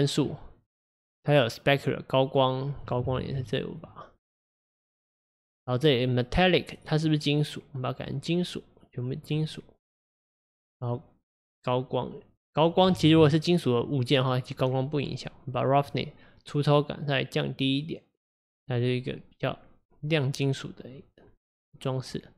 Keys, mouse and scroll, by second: 1.8-3.3 drag, 3.3 ctrl+z, 3.5 click, 5.7 click, 7.1-9.9 drag, 9.9-10.7 scroll up 4, 11.8-13.2 drag, 13.2 ctrl+z, 15.9-19.0 drag, 21.4-22.3 scroll down 3.